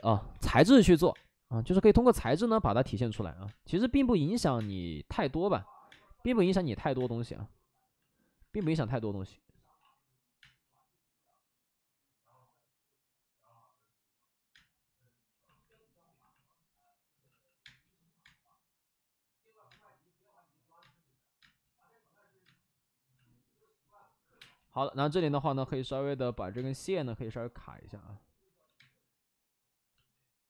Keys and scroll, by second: 0.2 3, 1.1 space, 2.2 space, 3.3 space, 4.0 x, 4.5 space, 5.8 space, 6.3 space, 6.9 space, 8.3 ctrl+z, 8.5 space, 9.7 ctrl+z, 10.3 space, 14.4 space, 17.2 x, 17.6 space, 18.1 space, 19.6 space, 20.7 space, 21.3 space, 24.2 5, 24.3 space, 25.1 space, 26.3 ctrl+z, 26.4 space, 26.9 x, 28.4 ctrl+z, 28.5 ctrl+z, 28.7 space.